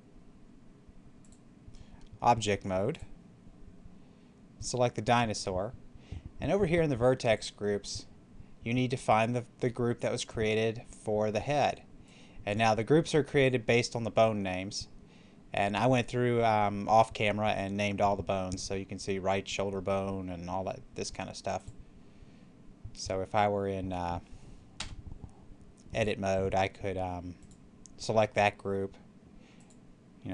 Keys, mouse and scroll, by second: 1.1 click, 4.5 right click, 7.1 click, 11.9-14.9 drag, 21.5 click, 24.6 Tab, 27.2 click.